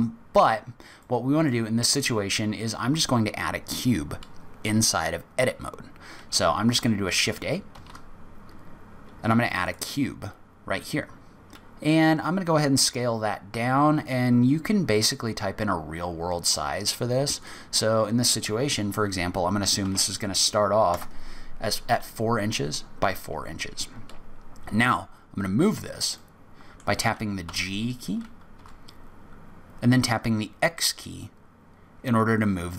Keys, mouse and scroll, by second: 0.4 scroll up 1, 1.0 middle click, 1.8-2.2 scroll down 3, 2.3 scroll up 2, 7.7 shift+a, 17.4 click, 26.1 middle click, 27.4 g.